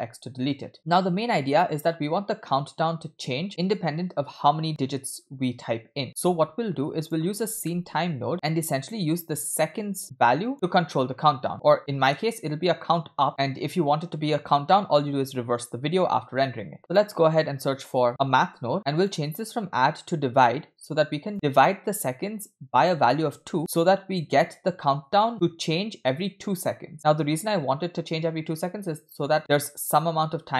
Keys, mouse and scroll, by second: 0.7 middle click, 6.2 shift+a, 9.4-10.5 drag, 11.5 click, 11.9 middle click, 16.7 shift+a, 19.0-21.3 drag, 21.7-22.5 drag, 22.8 click, 23.8-24.5 drag.